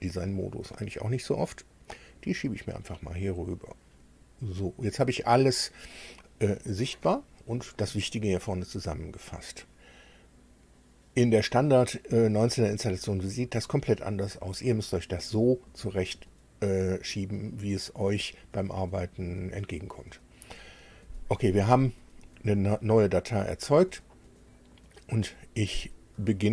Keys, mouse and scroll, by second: 1.7-4.8 drag.